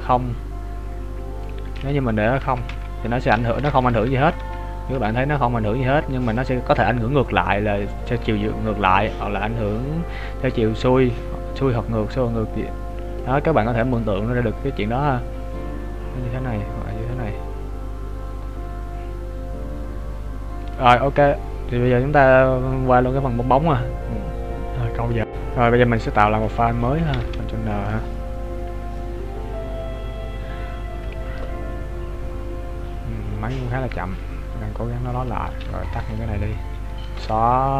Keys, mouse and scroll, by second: 3.9 KP_1, 4.3 KP_3, 4.9 KP_1, 6.3 click, 14.1 click, 27.2 ctrl+n.